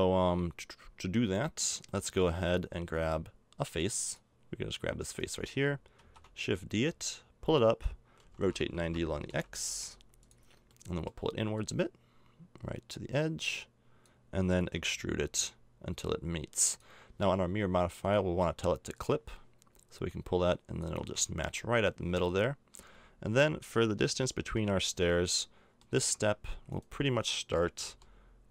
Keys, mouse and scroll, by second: 2.1 middle click, 4.0-5.9 drag, 5.0 right click, 5.9 shift+d, 8.2 r, 10.6 middle click, 11.5 click, 14.7 e, 21.0 a, 21.2 Tab, 22.2 middle click, 22.4 middle click, 22.6 middle click, 25.3 middle click, 26.0 Tab, 27.8 l.